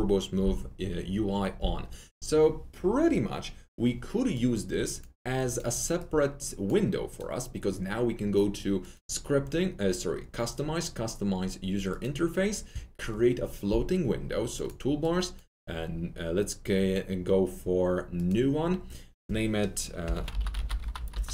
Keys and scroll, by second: 19.9-21.3 typing.